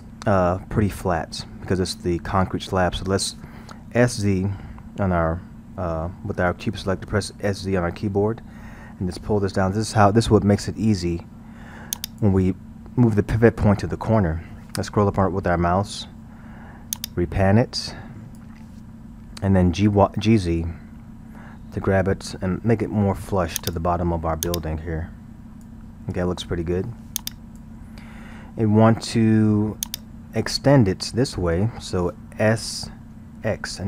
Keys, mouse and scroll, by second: 7.6 s, 14.7-15.5 scroll, 17.0-20.0 drag, 20.9 g, 24.5-26.1 drag, 26.1-27.2 scroll, 27.2-27.9 drag, 27.9-28.2 scroll, 29.8-32.9 drag, 33.2 s.